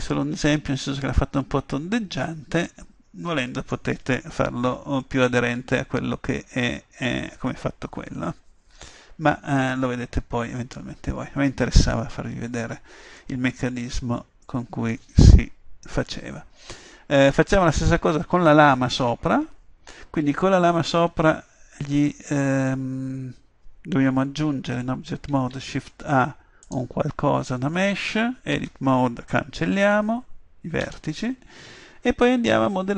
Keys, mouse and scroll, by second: 4.6 KP_7, 13.2-16.0 middle drag, 16.0 KP_7, 25.5 shift+a, 28.5 Tab, 29.6 Delete.